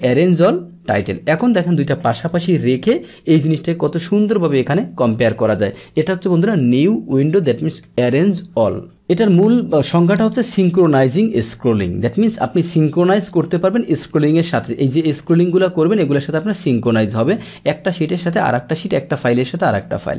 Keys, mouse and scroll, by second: 0.9 click, 2.1 click, 3.4-5.1 drag, 13.0 click, 15.2-16.2 drag.